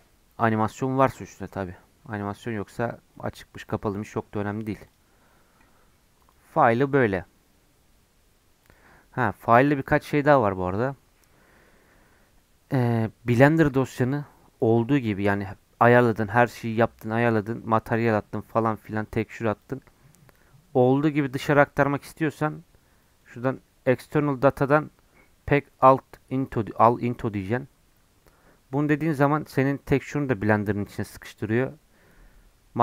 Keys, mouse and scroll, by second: 6.1-32.8 drag.